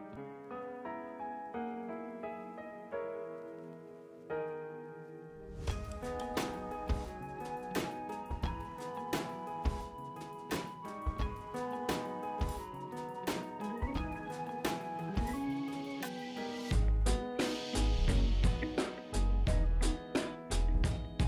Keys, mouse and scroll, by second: 0.1 scroll down 1, 1.1 click, 9.6 click, 12.8 ctrl+c, 13.4 click, 13.9 ctrl+v, 14.4 scroll down 1, 15.8-20.0 drag, 20.9 shift+Up, 21.1 shift+Left.